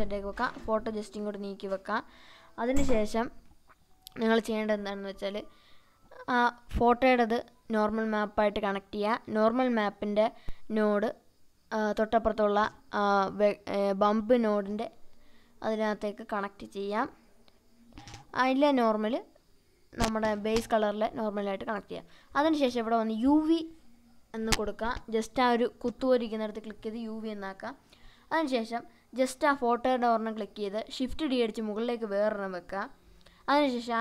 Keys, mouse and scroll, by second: 13.6 click, 18.7-20.6 drag.